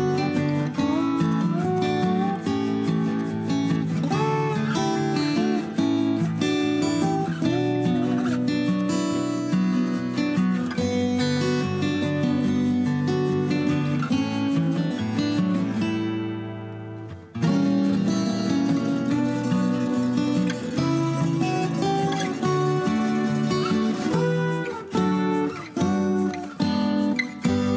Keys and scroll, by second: 21.1 5, 21.2 Return, 25.8 ctrl+a, 26.7 ctrl+h.